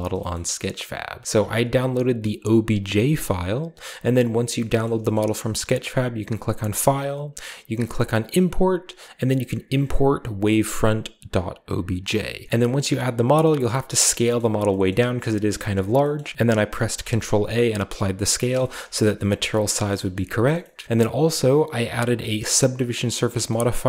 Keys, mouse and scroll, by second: 0.2-0.5 shift+middle drag, 0.7-1.2 middle drag, 0.7-1.2 scroll down 1, 4.7 shift+middle drag, 5.0-5.8 shift+middle drag, 6.5 click, 14.8 middle click, 15.4 shift+middle click, 15.6-16.3 shift+middle drag, 15.8-16.3 scroll up 1, 16.8 ctrl+a, 18.6 shift+middle click, 18.6-19.4 shift+scroll up 2, 19.6-20.3 shift+middle drag, 19.8 shift+scroll down 1, 20.7 middle drag, 20.8 r, 21.0 click, 21.7 click, 23.4 shift+middle click, 23.4-23.8 scroll up 1.